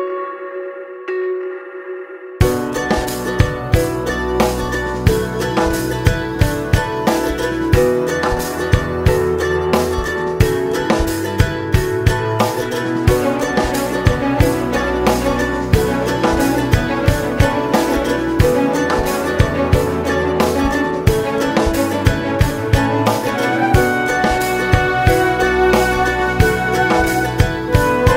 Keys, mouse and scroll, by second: 0.5 scroll up 1, 2.0 click, 2.4 scroll down 1, 3.0 scroll up 1, 3.4 scroll down 1, 3.7 click, 4.0 KP_Decimal, 4.1 scroll up 1, 6.5 scroll up 1, 6.6 click, 6.6 KP_1, 6.9 scroll down 1, 7.3 a, 7.7-8.2 scroll up 1, 8.5-9.2 drag, 8.9 scroll up 1, 9.2 scroll down 2, 9.9-10.5 drag, 10.1 scroll up 2, 10.9 scroll up 1, 13.4-15.6 drag, 13.4 scroll up 1, 13.7 scroll down 1, 14.1 scroll up 1, 16.1 click, 20.9 click, 22.3-23.9 drag, 25.7 click, 26.5-28.1 drag.